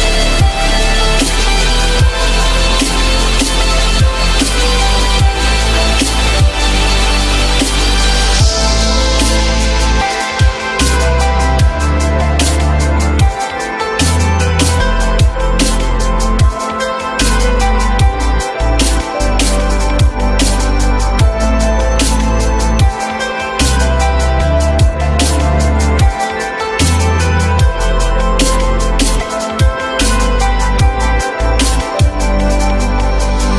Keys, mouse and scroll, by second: 0.0-0.5 typing, 9.0-9.8 typing, 11.7-12.6 typing, 16.9 typing, 17.1 Return, 19.8 alt+middle click.